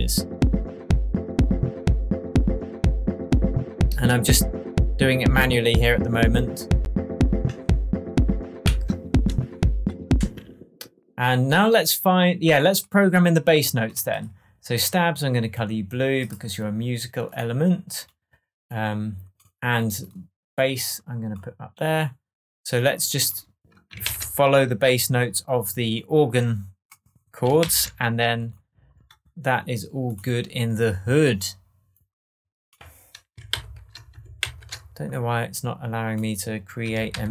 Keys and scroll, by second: 8.6 super+z, 10.1 space, 24.0 shift+super+m, 27.6 shift+super+m, 33.5 shift+super+m, 37.1 shift+super+m.